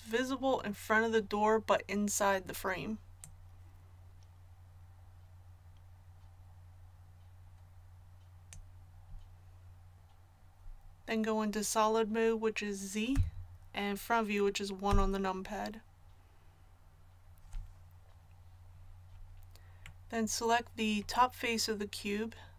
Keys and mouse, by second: 3.2-13.1 drag, 13.1 z, 14.8 KP_1.